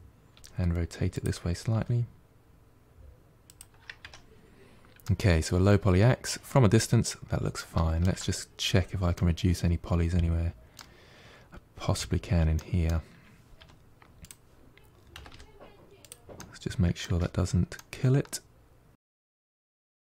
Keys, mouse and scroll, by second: 0.2 r, 1.6 g, 3.9 Tab, 4.2-4.9 scroll down 6, 4.9-7.9 middle drag, 8.2-9.0 scroll up 6, 9.0-12.0 middle drag, 12.4 middle click, 13.1-13.4 scroll up 1, 13.4 1, 14.1 click, 15.0 g, 16.2 middle click, 16.9 Tab, 17.3-17.6 scroll down 2, 17.6-18.9 middle drag, 18.9 Tab, 19.2-20.0 middle drag.